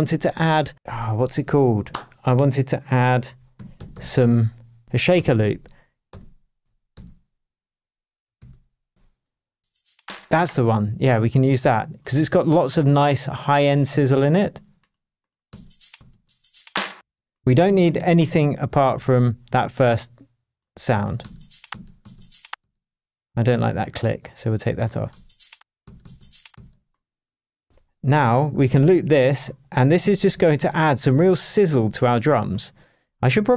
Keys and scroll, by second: 3.0-6.9 typing, 4.8 Left, 8.0-8.9 typing, 15.5 space, 17.9 super+space, 18.0 super+e, 18.9 super+BackSpace, 21.2 space, 21.7 space, 25.1 space, 28.6 super+d, 30.0 super+d, 31.1 super+d.